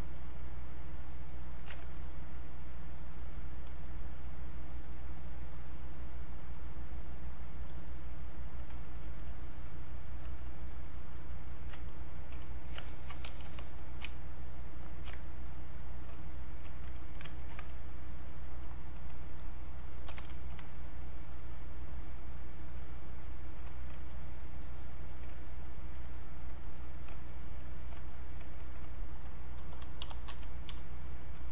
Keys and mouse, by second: 1.0 click, 1.7 ctrl+z, 2.4-7.7 drag, 9.6-11.8 drag, 13.3 q, 13.8 shift+click, 14.0 space, 14.4 click, 14.6 space, 15.2-17.0 shift+drag, 17.0 alt+click, 17.4 ctrl+right click, 17.7-20.0 ctrl+drag, 20.0 ctrl+b, 20.7-23.7 shift+drag, 24.1-26.0 shift+drag, 28.5 shift+click, 29.5-31.2 typing, 31.1 click.